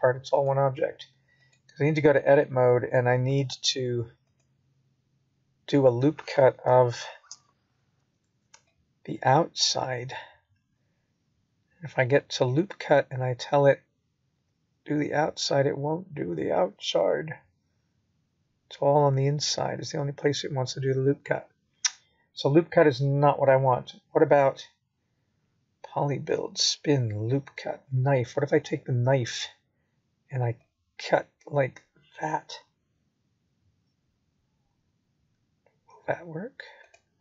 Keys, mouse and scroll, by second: 3.4 middle click, 7.0 click, 8.6 click, 10.7 click, 12.5 click, 15.2 click, 16.2 click, 17.2 middle click, 18.9 click, 21.2 middle click, 22.8 click, 25.3 KP_1, 26.1-26.5 scroll up 1, 27.3 shift+middle click, 31.1 click.